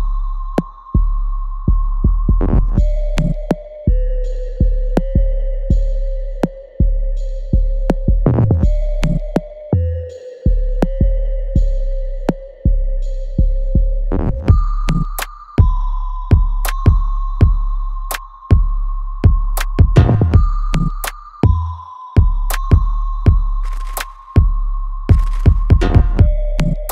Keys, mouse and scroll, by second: 0.6 shift+middle click, 3.6 click, 10.4 click, 14.9 scroll down 1, 16.2 click, 19.6 scroll up 1, 19.9 middle click, 21.0 click, 21.4 shift+middle click, 25.5 middle click, 26.8 click.